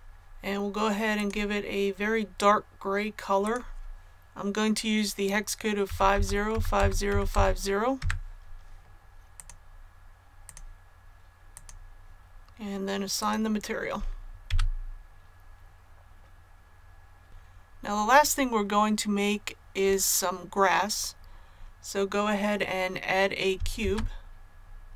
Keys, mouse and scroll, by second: 1.1 click, 5.8-7.2 typing, 9.3 click, 14.4 a, 17.2-19.7 scroll down 1, 21.1-23.5 scroll down 1, 23.7 shift+a.